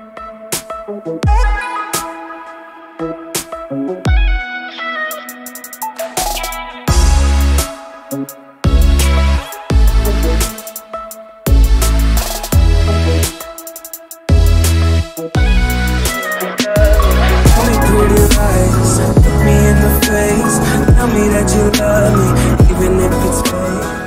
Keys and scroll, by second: 15.9 alt+space.